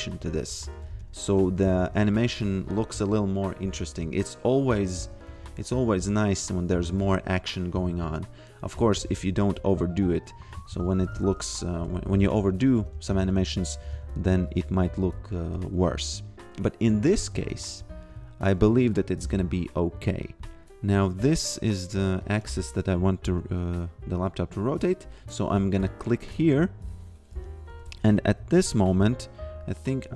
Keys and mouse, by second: 0.1 g, 0.9 a, 3.6 g, 5.3 a, 5.9 f, 8.8 a, 10.1 g, 11.9 a, 13.6 shift+a, 13.9 f, 15.5 a, 17.3 a, 20.1 click, 22.5 ctrl+z, 26.2 click, 26.9 f, 27.7 a, 28.5 g.